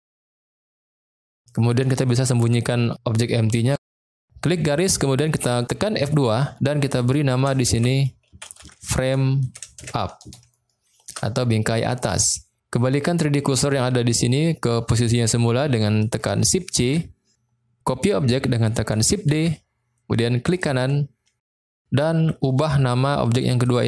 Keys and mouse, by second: 0.2-0.8 shift+middle drag, 6.3 F2, 16.7 shift+c, 19.3 shift+d, 20.4 click, 23.7-23.8 drag.